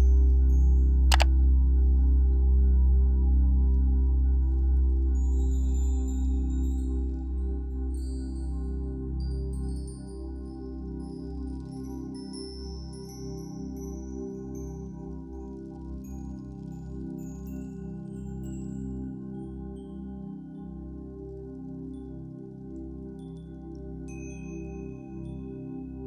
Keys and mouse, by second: 13.6 ctrl+-, 17.3 click, 20.0 Escape, 20.0 click, 23.6 Return, 24.8 click.